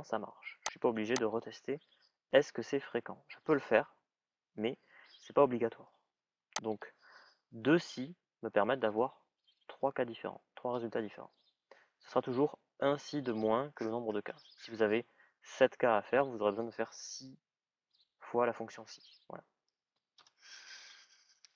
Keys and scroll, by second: 20.0 Return.